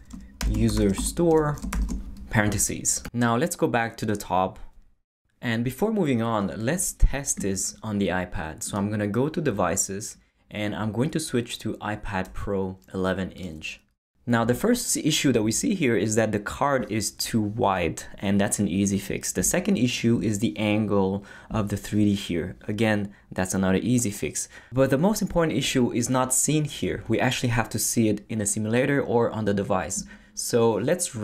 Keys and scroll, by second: 0.0-1.7 typing, 0.1 shift+Return.